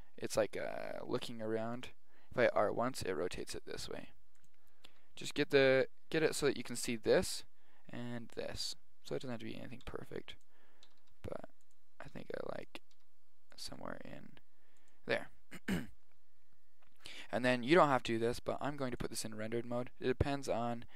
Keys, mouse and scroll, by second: 2.4 r, 2.5 r, 4.9 g, 5.7 g, 9.9 g, 10.9 r, 12.2 r, 13.0 r, 13.7 g, 18.2-19.9 drag.